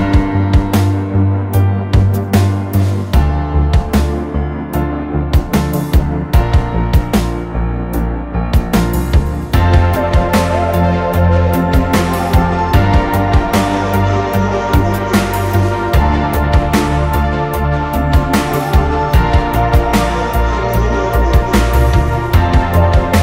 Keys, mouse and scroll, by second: 0.2 scroll down 1, 1.3 ctrl+z, 2.1 ctrl+z, 2.7 scroll up 1, 3.2 ctrl+z, 3.5 scroll up 1, 3.9 ctrl+z, 4.1 ctrl+z, 4.7 middle click, 5.3 scroll up 1, 5.5 scroll down 1, 5.7 space, 6.1 middle click, 6.3 scroll down 1, 6.5 middle click, 6.9 scroll up 1, 7.1 middle click, 8.2 scroll up 1, 8.4 scroll down 1, 8.5 middle click, 10.1 scroll down 1, 10.2 middle click, 10.6 scroll up 1, 10.9 typing, 14.1 r, 14.1 scroll up 1, 19.5 Escape, 20.1 scroll up 1.